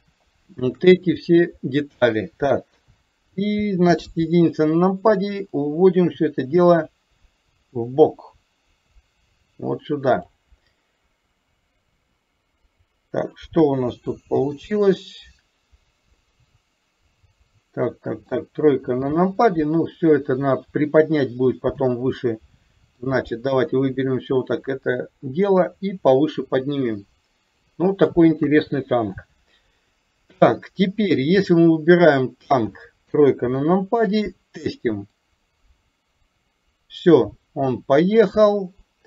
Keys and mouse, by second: 0.1-0.7 shift+drag, 2.8 KP_3, 3.9 KP_1, 5.7-10.4 drag, 13.6 KP_1, 14.7-18.3 middle drag, 18.6 KP_3, 21.8 click, 23.0 click, 25.3-27.7 drag, 28.6 KP_1, 29.8 click, 31.5 click, 33.2 KP_3, 35.3-38.5 drag.